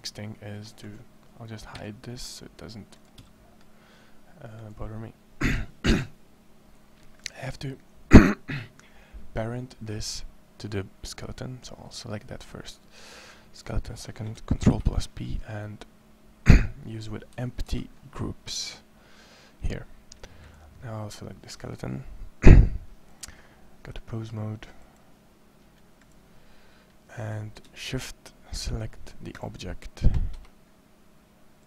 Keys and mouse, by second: 1.5 h, 3.0 h, 14.5 ctrl+p, 17.5 ctrl+p, 30.1 Escape.